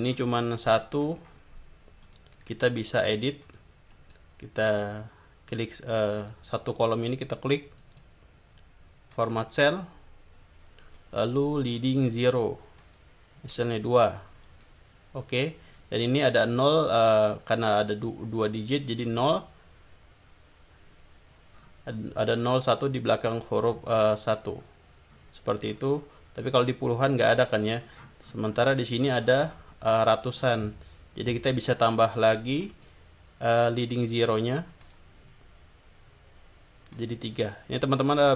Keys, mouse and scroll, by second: 2.0 click, 3.4 click, 3.9 right click, 5.5 click, 6.2 click, 6.9 click, 7.8 right click, 9.1 click, 12.8 click, 13.5 click, 14.5 click, 15.7 click, 21.5 scroll down 2, 22.3-22.7 scroll up 2, 24.4-25.1 scroll down 4, 25.6-26.2 scroll down 4, 27.3-27.9 scroll up 2, 27.9-29.7 scroll down 3, 30.4-30.9 scroll up 2, 31.5 click, 32.6 right click, 33.9 right click, 34.8 click, 36.9 click.